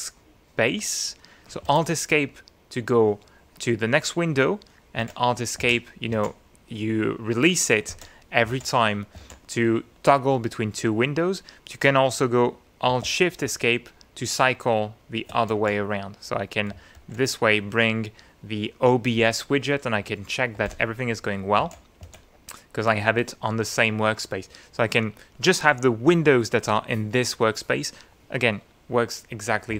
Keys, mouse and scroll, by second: 5.2 alt+Escape, 5.8 Escape, 6.4 Escape, 8.1 alt+Escape, 8.7 alt+Escape, 9.4 alt+Escape, 13.4 alt+shift+Escape, 15.8 alt+shift+Escape, 17.0 alt+shift+Escape, 20.8 alt+Escape, 21.8 alt+Escape, 22.2 alt+Escape.